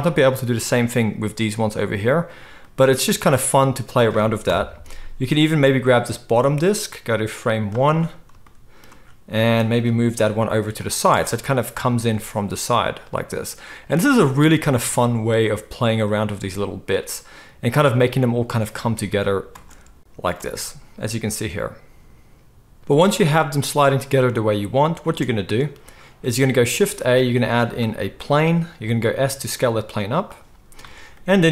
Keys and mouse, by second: 3.3-4.5 drag, 4.5-6.4 middle drag, 4.5 KP_7, 6.4-10.8 drag, 10.2 g, 10.8-16.0 middle drag, 11.1 space, 16.0 click, 16.1-31.5 middle drag, 19.5 space, 20.3 space, 22.8 space, 25.0 space, 26.7 shift+a, 28.8 s.